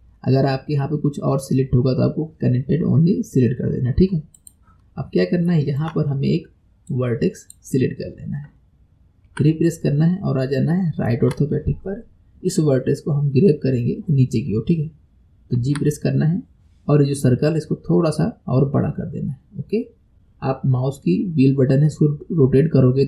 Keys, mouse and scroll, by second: 4.4 click, 5.0-5.5 scroll up 4, 5.5-6.9 shift+middle drag, 6.9 click, 8.0-9.3 scroll down 2, 9.3 KP_3, 10.1 scroll down 2, 10.7-13.8 shift+middle drag, 15.6 g.